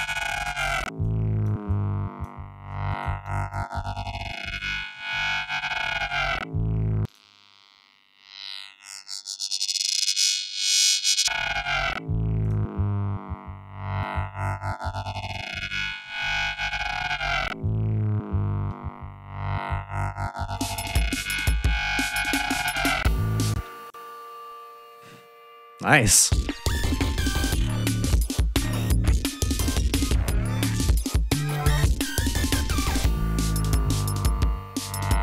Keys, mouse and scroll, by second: 0.5 click, 1.2 click, 2.4 click, 3.8 click, 5.0 click, 6.6 click, 8.5 click, 10.5 click, 11.9 click, 18.9-19.2 scroll up 2, 20.1 click, 21.4 ctrl+scroll down 2, 21.9 ctrl+scroll up 2, 23.1 space, 23.3 click, 24.9 scroll down 2, 25.7 click, 25.9 space, 26.2 ctrl+scroll down 2, 26.8 ctrl+scroll up 2.